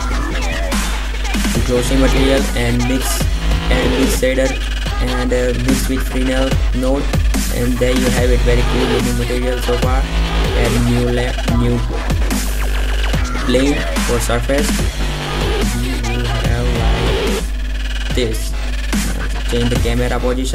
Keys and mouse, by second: 1.5 shift+a, 5.7-7.4 drag, 13.0 shift+c, 13.5 shift+a, 15.7 s, 18.0 KP_0.